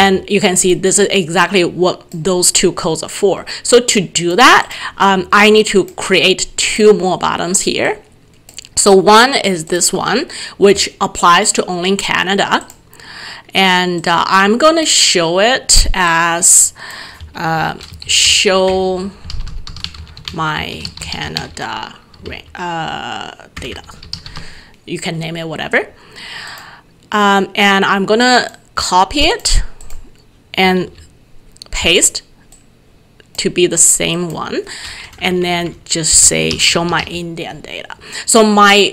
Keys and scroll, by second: 0.0 alt+Tab, 17.6 shift+End, 17.7-22.8 typing, 30.8 ctrl+v, 36.2 ctrl+v, 36.3-37.5 typing.